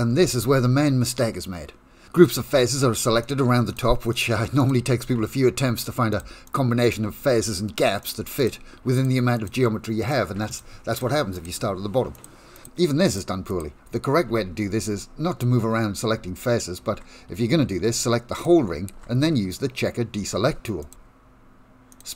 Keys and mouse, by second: 0.2 3, 3.2 click, 3.7 shift+click, 4.1 shift+click, 4.6 shift+click, 6.1 shift+click, 6.4 shift+click, 6.8 shift+click, 8.0 shift+click, 8.3 shift+click, 8.9 shift+click, 9.3 shift+click, 10.5 shift+click, 10.9 shift+click, 11.3 shift+click, 12.1 shift+click, 12.5 shift+click, 13.0 shift+click, 13.5 shift+click, 17.5 3, 20.9-22.0 drag.